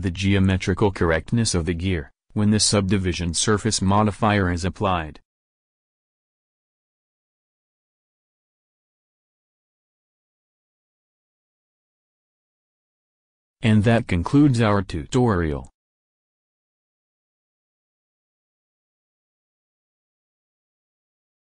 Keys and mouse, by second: 0.5 middle click, 1.2 KP_1, 1.4 KP_1, 1.7 KP_7, 4.5 Tab, 6.4-7.7 drag, 11.8 click.